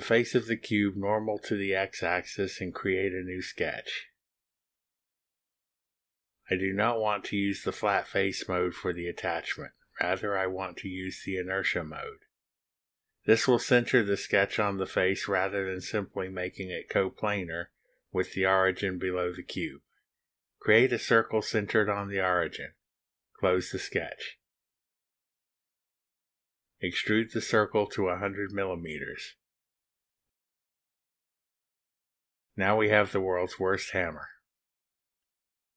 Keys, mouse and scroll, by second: 1.7 click, 3.2 click, 6.5 click, 8.3 click, 10.5 click, 12.4 click, 14.3-15.1 drag, 21.0 click, 23.0 click, 24.3 click, 26.1 click, 28.3 click, 29.6 1, 29.9 0, 31.9 Return, 33.9 click, 35.4 click, 35.5 middle click, 35.5-35.7 scroll down 1.